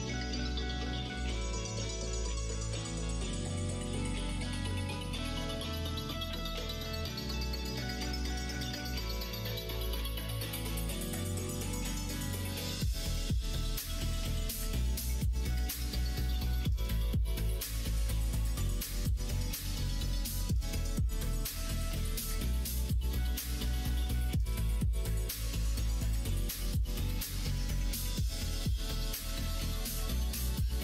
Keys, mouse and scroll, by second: 0.8 Tab, 1.0 middle click, 1.9 alt+z, 2.5 alt+z, 3.0 alt+z, 3.6 click, 4.2 click, 4.9 middle click, 5.9 KP_1, 6.3 KP_3, 7.3 Tab, 9.0 alt+z, 10.4 e, 12.5 alt+z, 14.5 e, 18.7 s, 22.5 alt+z, 23.6 s, 26.0 e, 30.6 middle click.